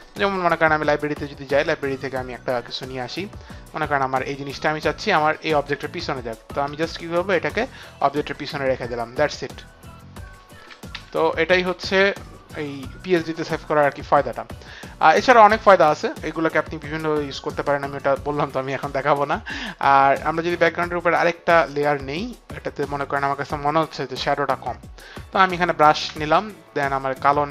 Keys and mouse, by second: 0.2 click, 0.4 click, 3.7 click, 5.4 click, 6.6 Return, 7.3 click, 9.1 click, 10.7 ctrl+d, 11.0 c, 11.8 v, 13.0-13.7 typing, 13.2 click, 13.7 click, 19.7 Delete, 21.8 click, 26.2 b.